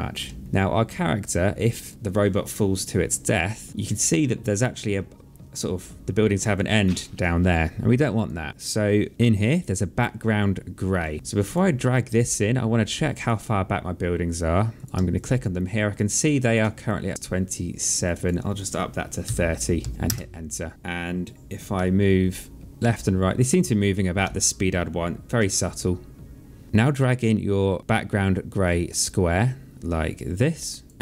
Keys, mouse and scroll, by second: 0.2 alt+click, 1.9 click, 3.7 Right, 7.9 click, 9.3 click, 12.1 alt+middle click, 12.9 click, 14.5 click, 14.9 alt+click, 17.8 click, 19.0 KP_3, 19.6 KP_0, 19.9 KP_Enter, 21.5 Right, 22.6 Left, 24.0 Right, 26.4 click, 28.8 click, 30.3 click.